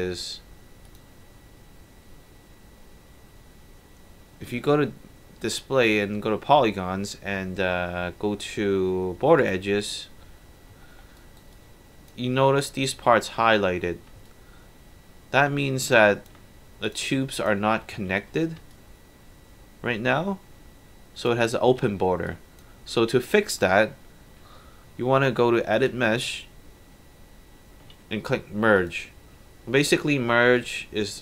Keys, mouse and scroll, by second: 0.9 click, 9.4 click, 10.9 alt+middle click, 11.1 alt+right drag, 11.5-12.1 alt+drag, 12.3 middle click, 12.6 alt+right drag, 14.3-16.3 alt+drag, 16.9 click, 17.4 click, 18.0 3, 18.7-20.8 alt+drag, 21.7 alt+1, 22.0 scroll down 2, 22.3 alt+drag, 23.1 alt+middle click, 25.7 click, 28.8 click, 30.6-31.2 right drag.